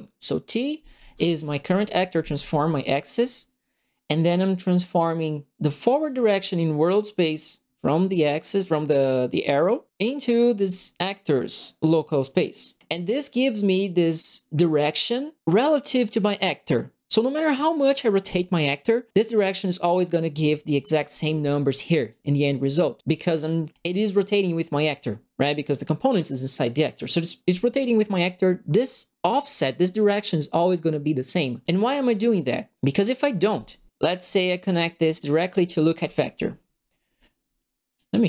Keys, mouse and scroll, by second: 1.3 click, 6.0 click, 10.6 click, 21.9 click, 23.9 click, 24.7 click, 34.4 click, 37.8 click.